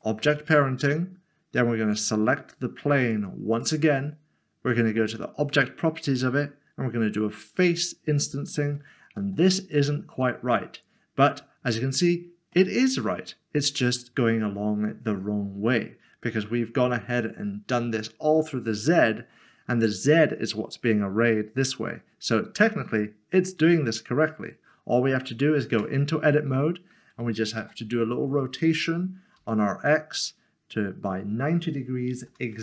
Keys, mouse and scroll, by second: 0.4 scroll down 1, 3.0 click, 7.5 click, 9.4 middle click, 23.6 click, 25.7 Tab, 27.6 typing, 29.4 typing, 32.1 typing.